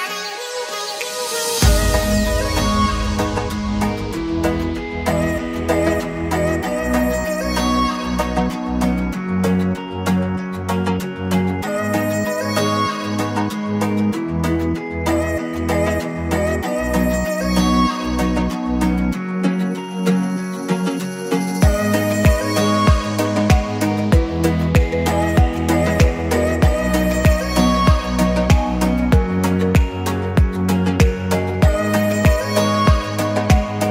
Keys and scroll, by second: 5.5 Escape, 8.8 Escape, 9.9-11.2 typing, 11.8 Escape, 17.7 Escape, 18.8 Escape, 27.4 Escape, 29.1 Escape.